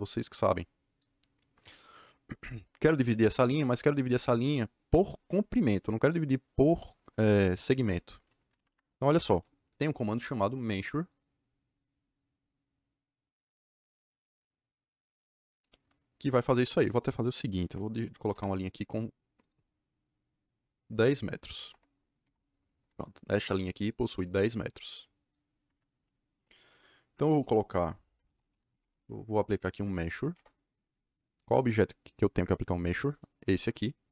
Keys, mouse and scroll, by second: 1.4 Escape, 1.5 Escape, 8.5 Escape, 8.6 Escape, 11.0 click, 16.5 click, 16.7 click, 17.5 Delete, 18.1 l, 18.2 Return, 19.3 click, 21.5 KP_1, 21.6 KP_0, 22.2 KP_Enter, 22.8 KP_Enter, 23.8 click, 24.2 click, 25.5 Escape, 25.6 Escape, 25.9 Escape, 27.8-29.0 typing, 30.0 Down, 30.2 Return, 33.0 click.